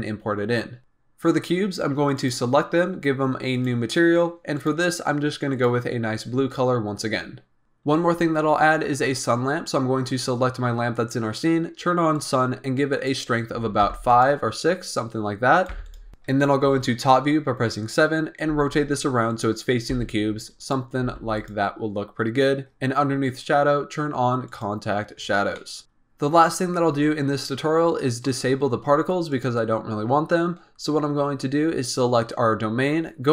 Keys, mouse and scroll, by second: 0.8 click, 2.1 click, 3.5 click, 4.5-4.9 drag, 5.4 click, 7.6-7.9 scroll down 1, 9.3-10.0 scroll down 3, 10.0-12.1 scroll down 3, 14.0 click, 15.5 click, 16.1 scroll up 4, 16.6 KP_7, 17.8-18.4 scroll down 5, 18.4 r, 19.6 scroll up 2, 19.8 g, 21.0 r, 23.2-24.5 drag, 25.5-25.8 middle drag, 25.8-27.7 scroll down 3, 27.7 scroll up 2, 29.2 click.